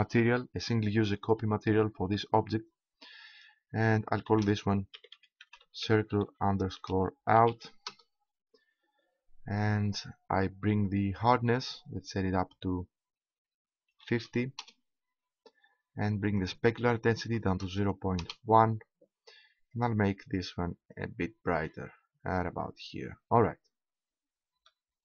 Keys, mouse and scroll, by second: 10.7 middle click, 11.2-13.0 drag, 16.3-17.4 drag, 17.4 right click, 19.6-21.4 drag, 23.4 middle click.